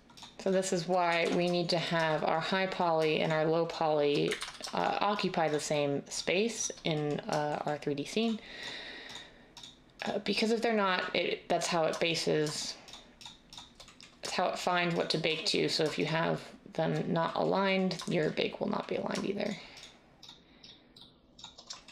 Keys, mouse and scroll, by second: 1.1 ctrl+z, 4.3 ctrl+z.